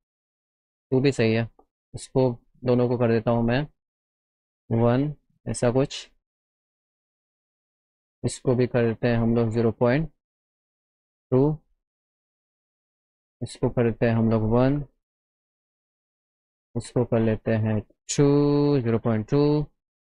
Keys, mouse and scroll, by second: 0.7 click, 1.6 click, 3.8 click, 4.6 Up, 5.9 middle click, 6.5 middle click, 6.9 middle click, 7.3 middle click, 7.8 click, 9.7 click, 10.5 KP_0, 10.8 KP_0, 11.1 Return, 12.5 click, 14.0 click, 14.7 Up, 16.3 click, 17.6 click.